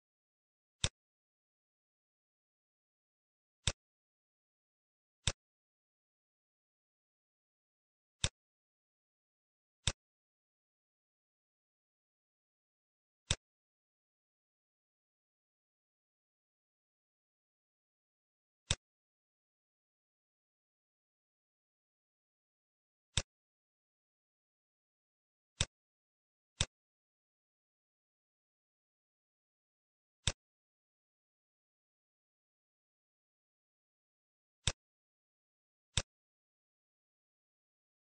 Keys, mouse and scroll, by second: 0.0 scroll down 1, 6.8 shift+d, 9.7 click, 13.2 click, 16.5-17.6 scroll up 4, 16.8 middle click, 17.6 middle click, 18.7 shift+click, 22.4-22.9 scroll down 3, 23.1 click, 24.6 shift+d, 26.7 click, 29.1 middle click, 33.3 middle click, 34.7 click, 35.0 shift+a.